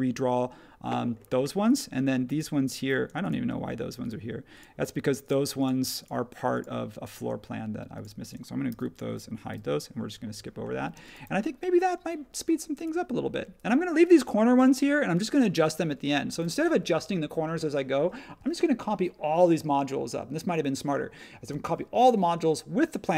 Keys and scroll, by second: 8.7 super+g, 9.5 super+e, 10.9 space.